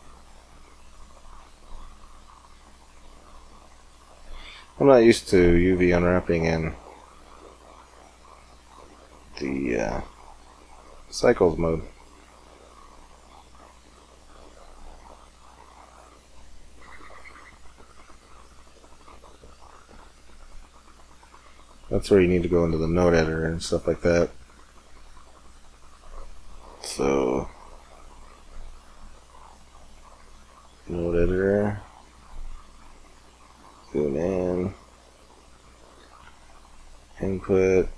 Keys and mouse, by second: 0.4-6.2 drag, 8.1-11.0 drag, 11.0-12.6 middle drag, 12.6-14.2 drag, 16.4-18.0 middle drag, 18.3 middle click, 30.6-33.4 middle drag.